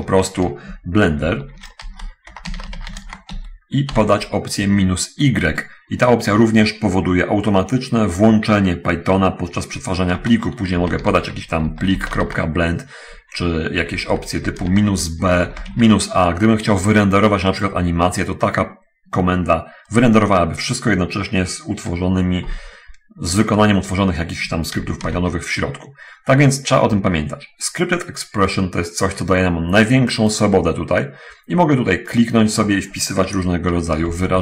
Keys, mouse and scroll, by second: 1.6 ctrl+shift+=, 1.8-4.3 typing, 10.6-12.5 typing, 13.8 BackSpace, 13.8 BackSpace, 14.9-16.2 typing, 15.4 End, 25.2 ctrl+c, 25.4 ctrl+d, 30.4 click, 32.6 click, 34.2 2.